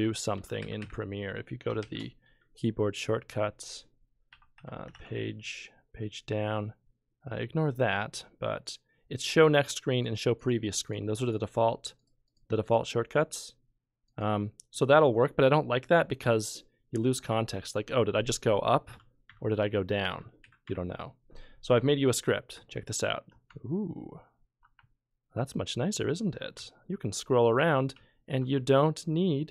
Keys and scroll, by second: 0.0 Page_Down, 0.3 Page_Up, 0.6 Page_Down, 1.8 shift+k, 4.1-5.6 typing, 17.2 Page_Up, 18.4 Page_Down, 18.9 Page_Up, 20.1 Page_Down, 20.4 Page_Down, 20.6 Page_Up, 22.5 F12, 23.5 F11, 24.7 F12, 26.5 F11, 27.9 F11, 28.5 F12.